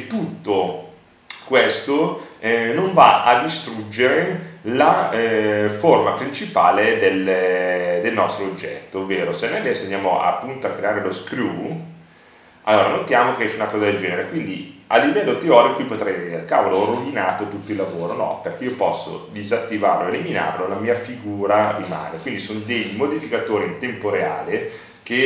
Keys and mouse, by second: 10.5 click, 12.0 middle click, 16.3-18.6 middle drag.